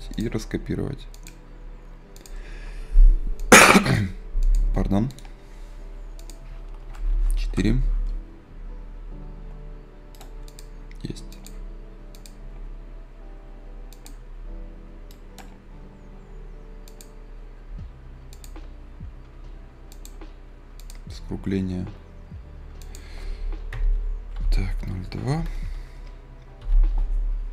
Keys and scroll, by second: 22.5 Return.